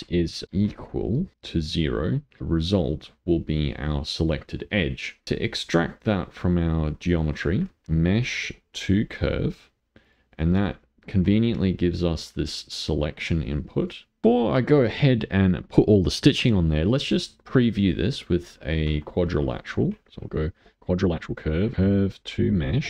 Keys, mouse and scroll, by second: 2.0 middle click, 2.8 click, 5.2 middle click, 5.4 click, 6.3 middle click, 7.0 click, 7.8 ctrl+shift+a, 10.7-12.2 middle drag, 12.2 click, 14.2 middle click, 16.6-17.6 middle drag, 17.6 click, 18.4 click, 19.2 ctrl+shift+a, 21.5 click, 21.7 ctrl+shift+a.